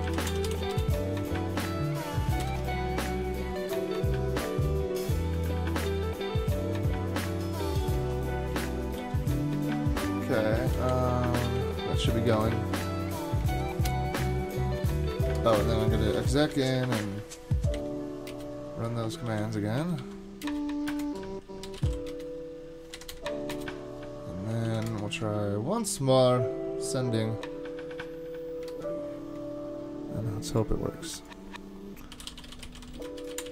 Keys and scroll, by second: 8.0 super+k, 9.0 ctrl+c, 10.9 Up, 11.5 Up, 12.3 Return, 13.5 super+k, 14.8 super+Tab, 15.3 shift+super+Tab, 16.1 ctrl+c, 17.0 Up, 17.7 Up, 18.3 Return, 19.2 alt+c, 20.0 Down, 20.4 Return, 20.5 super+v, 21.4-24.0 typing, 24.7 super+k, 24.9 super+Tab, 25.1 super+Tab, 28.7 super+Tab, 31.9-33.5 typing.